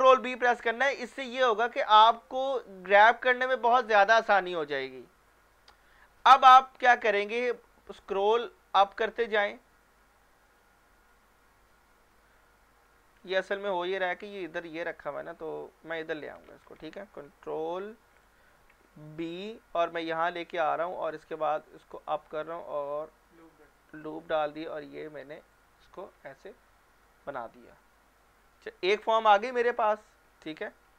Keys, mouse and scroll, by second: 0.3 ctrl+b, 7.9-8.4 scroll up 1, 12.9 Escape, 16.6 ctrl+z, 18.2 alt+click, 19.4 ctrl+b, 21.3-23.6 scroll up 1, 24.2 scroll up 1, 25.5 click, 26.1 scroll down 1, 26.7-27.3 middle drag, 30.3 scroll down 1, 30.8-30.9 scroll down 1.